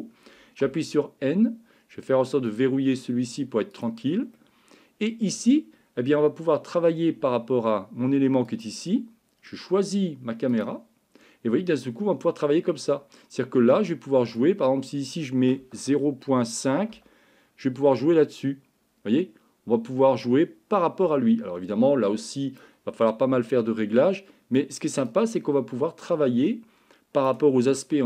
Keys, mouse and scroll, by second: 0.7 n, 4.4 middle click.